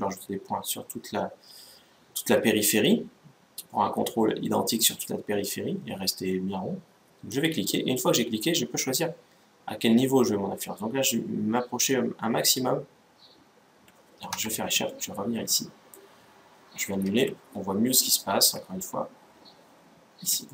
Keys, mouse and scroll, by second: 14.6-16.3 middle drag, 16.8 ctrl+z, 17.5-19.5 middle drag, 20.2-20.5 middle drag.